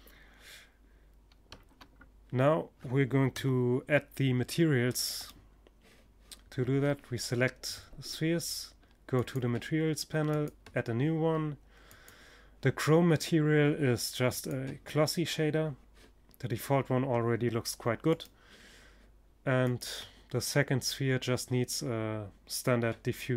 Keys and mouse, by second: 0.0 Escape, 1.8 KP_0, 2.8 click, 3.6-5.4 right drag, 5.4-6.6 middle drag, 7.6-12.3 drag, 16.5-18.2 right drag, 18.1 click, 18.2 middle click, 18.8-19.8 drag.